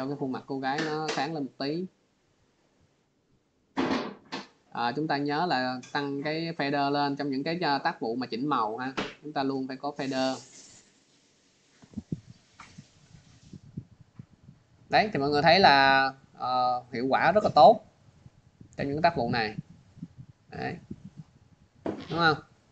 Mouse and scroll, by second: 3.8 scroll, 5.5 click, 6.1 click, 10.4 click, 11.2 click, 12.7 click, 17.1 click, 18.4 click, 20.3 click, 20.7 click, 21.2 click, 22.4 click.